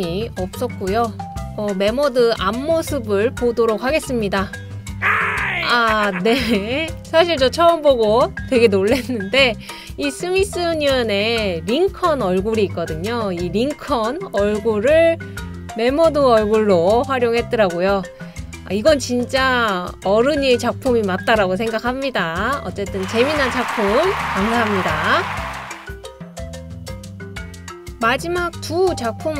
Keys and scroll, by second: 1.3 typing, 4.2 typing, 21.3 BackSpace.